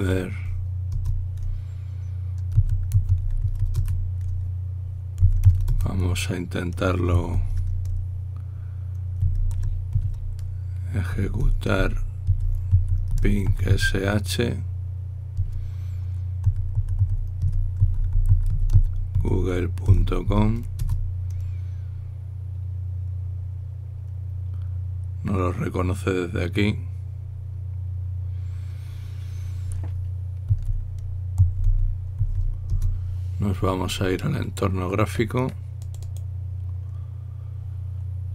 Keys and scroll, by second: 0.0-0.6 typing, 1.7 Return, 3.1-6.4 typing, 8.0 ctrl+l, 9.7-10.7 typing, 11.8-14.9 typing, 16.9-21.5 typing, 23.7-24.5 typing, 31.0-33.5 typing.